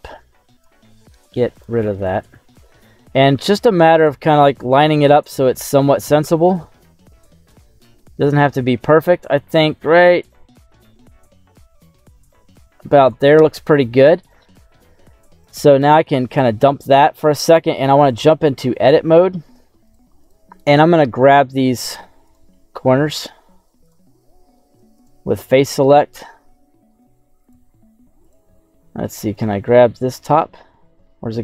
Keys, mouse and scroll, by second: 1.4 click, 1.9-2.3 scroll down 2, 2.3 middle click, 2.8-4.3 scroll down 2, 4.3-13.0 drag, 15.3-16.4 drag, 16.7-17.5 scroll up 2, 17.5 Tab, 18.1 right click, 19.8 alt+shift+right click, 20.1 alt+shift+right click, 21.0 scroll down 1, 21.1 middle click, 22.1 alt+shift+right click, 22.7 middle click, 23.7 alt+shift+right click, 24.2 middle click, 24.8 alt+shift+right click, 25.3-26.8 middle drag, 27.3 alt+shift+right click, 28.1 alt+shift+right click, 29.3 alt+shift+right click, 30.3-30.7 scroll up 3, 31.1 scroll up 3.